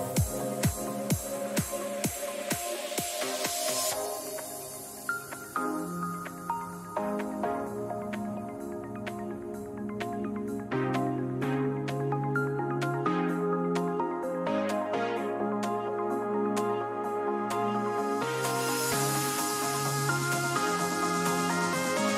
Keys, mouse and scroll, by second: 1.6 middle click, 3.2-5.2 drag, 11.3 ctrl+z, 12.7-14.0 drag, 14.0-16.6 middle drag, 16.4 z, 17.2 z, 17.8 a, 19.2 Tab.